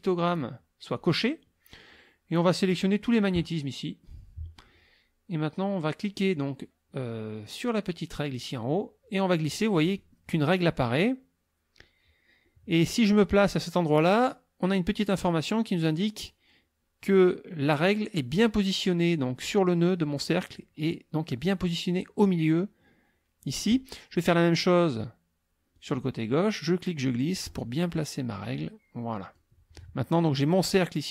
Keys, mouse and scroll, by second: 0.3 click, 1.0 click, 8.8-19.6 drag, 25.8-29.6 drag.